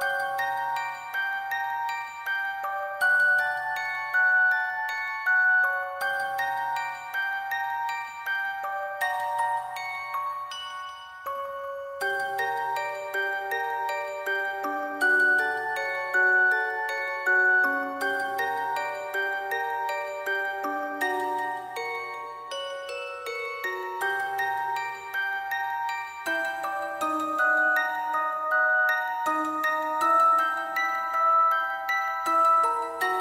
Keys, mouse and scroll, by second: 1.7 alt+click, 3.9 alt+click, 4.4 alt+click, 5.0-5.6 [, 6.0 alt+click, 6.5 alt+click, 13.0 alt+click, 13.8 w, 14.6 alt+click, 14.7 alt+click, 14.8 alt+click, 14.9 alt+click, 19.0 alt+click, 20.6 alt+click, 21.8 alt+click, 31.8 alt+click, 32.4 alt+shift+click, 32.9 alt+click.